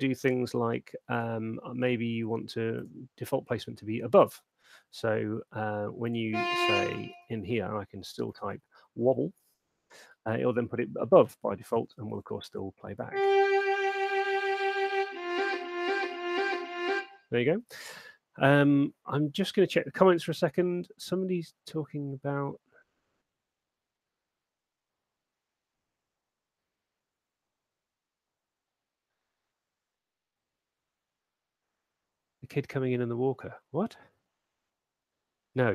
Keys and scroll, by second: 5.8 Escape, 7.3-9.2 typing, 12.3 alt+shift+space, 16.9 space, 17.8 space.